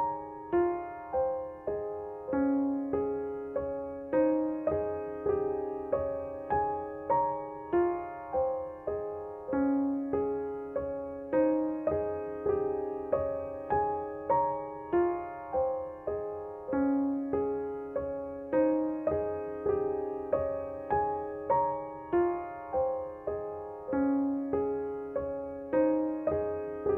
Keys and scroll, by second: 0.0 shift+a, 4.2 9, 4.5 0, 5.7 g, 5.9 x, 14.1 g, 17.6 g, 20.4 s.